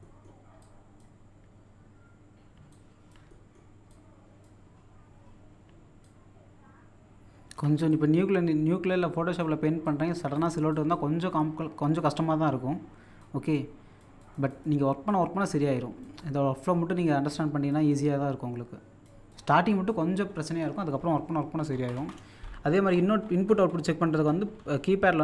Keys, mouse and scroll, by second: 0.0 typing, 0.0 middle click, 0.6-2.5 drag, 2.5 click, 2.5 typing, 3.3 middle click, 3.9-5.4 drag, 5.7-7.9 drag, 7.9-10.4 drag, 9.8 typing, 11.8-12.5 typing, 12.5 shift+click, 13.2-20.2 drag, 20.2-20.9 scroll down 1, 23.8 middle click.